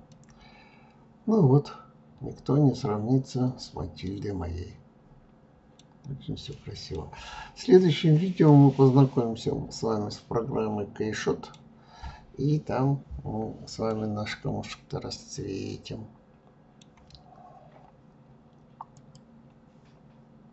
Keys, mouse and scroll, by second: 5.0-5.5 scroll down 3, 5.5 middle click, 6.0-6.3 scroll up 1, 6.3 scroll down 2, 6.7 scroll up 1, 7.5-10.5 middle drag, 12.9-15.9 middle drag.